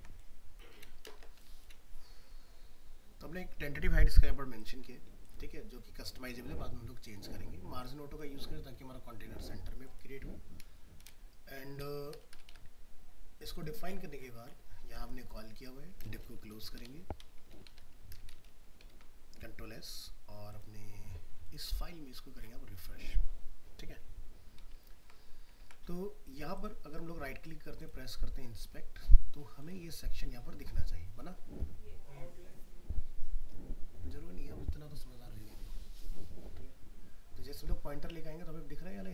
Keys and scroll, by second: 18.9 ctrl+s, 25.6 ctrl+a.